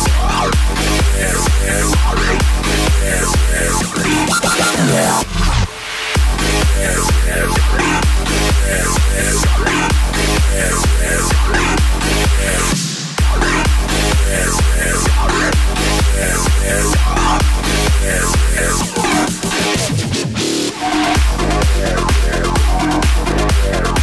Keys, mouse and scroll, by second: 7.5 space, 8.2-13.7 drag, 13.7 a, 15.8-19.7 drag.